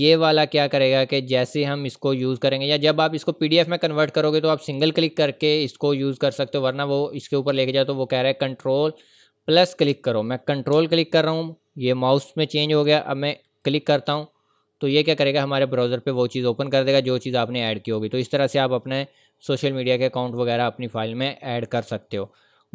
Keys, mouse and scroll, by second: 10.7 click, 17.3 click, 19.6-20.3 scroll up 1, 20.3 click, 20.9-21.7 scroll up 1.